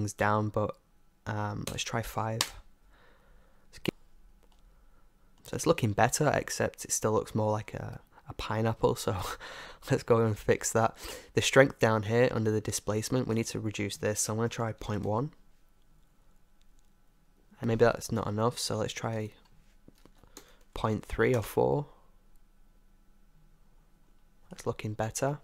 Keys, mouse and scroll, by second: 4.2-6.7 middle drag, 7.4-9.3 middle drag, 11.5-12.7 middle drag, 13.4-16.7 drag, 17.6-19.0 middle drag, 19.2-21.1 drag, 23.7-25.4 middle drag.